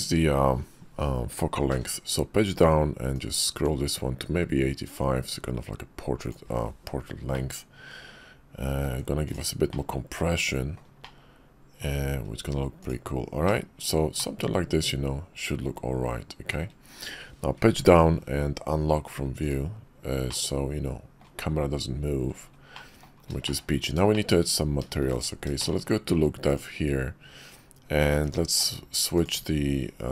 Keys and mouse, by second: 1.7 Page_Down, 7.3-8.8 ctrl+middle drag, 9.7-10.8 middle drag, 11.0 shift+middle click, 12.8 middle click, 14.2-16.6 shift+middle drag, 17.8 Page_Down, 20.3-21.2 middle drag, 22.7-23.1 drag, 23.4 shift+middle click, 24.1 shift+click, 25.6 shift+click, 28.2-30.1 drag.